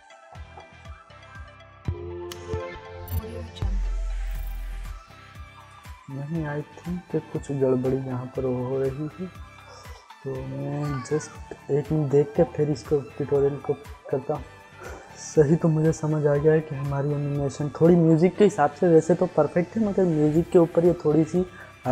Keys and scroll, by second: 1.6 space, 4.9 space, 6.5 ctrl+z.